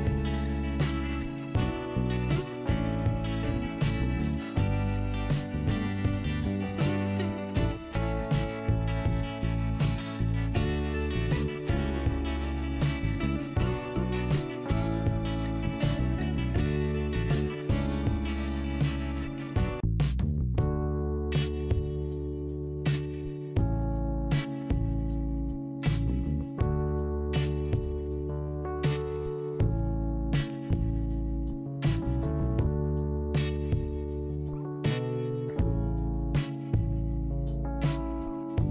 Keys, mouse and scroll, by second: 0.3 click, 2.3 scroll down 2, 4.1 scroll up 1, 5.0 click, 6.6 click, 7.8 scroll down 1, 9.5 scroll up 2, 10.2 scroll down 1, 11.1 click, 12.2 click, 14.2 click, 14.6 click, 14.6-15.1 scroll up 1, 15.1 click, 16.6 click, 18.0 click, 19.7 click, 21.8-23.1 scroll down 2, 23.9 scroll down 1, 25.1 ctrl+5, 26.8 click, 28.3 click, 29.1 click, 30.1-31.2 scroll down 1, 31.2-32.6 scroll up 2, 32.6 click, 33.8 i, 34.8 scroll up 1, 37.3 click.